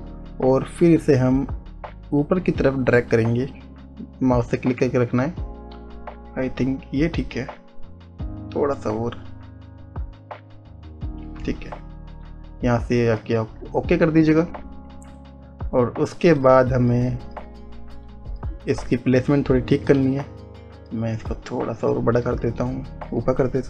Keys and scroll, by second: 20.5 ctrl+z.